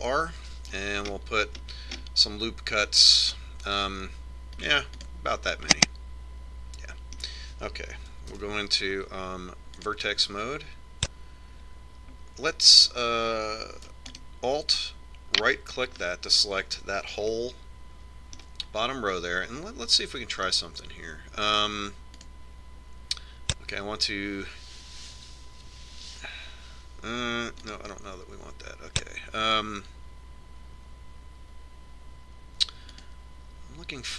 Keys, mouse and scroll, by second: 0.7 ctrl+r, 6.9-8.7 middle drag, 9.5 ctrl+Tab, 15.3-16.9 right drag, 17.2-20.3 middle drag, 21.1-22.8 middle drag, 23.4-25.2 drag, 28.9-30.6 drag.